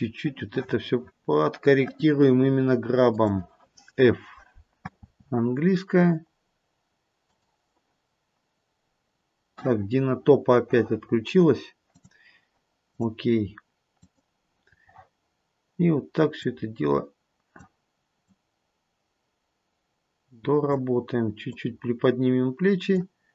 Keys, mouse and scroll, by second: 3.2 click, 4.9 f, 11.8 click, 14.0 click, 16.4 click, 18.2 click, 21.5 click.